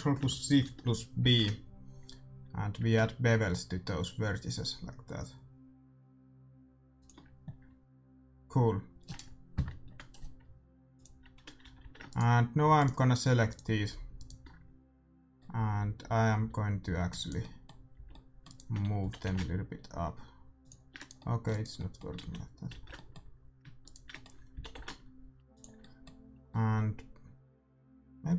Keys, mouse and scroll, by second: 10.9-12.7 drag, 11.6 a, 11.7 a, 12.0-16.1 right drag, 14.9 c, 17.3-19.2 middle drag, 17.9 c, 19.0 g, 20.9-22.7 right drag, 21.7-28.2 middle drag, 22.1 ctrl+z, 22.4 click, 22.7 ctrl+z, 23.8-25.6 right drag, 24.5 g.